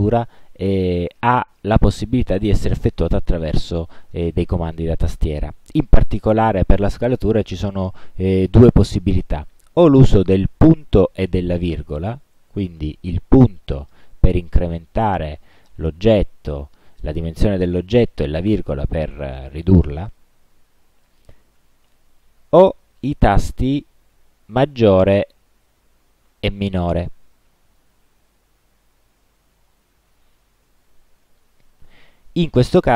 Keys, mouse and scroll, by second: 13.4 ., 18.5 ,, 20.9 ., 25.2 shift+,.